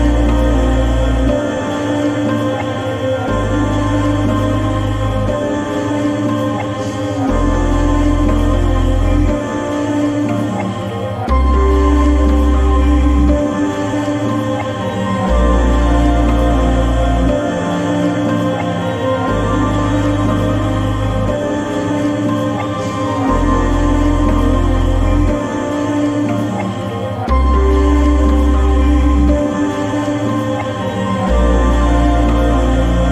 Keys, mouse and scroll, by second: 5.4-9.6 drag, 12.1 click, 13.9 click, 15.2-16.5 drag, 18.4 click, 20.3 click, 20.4-26.4 drag, 26.4-30.2 drag, 31.6 right click.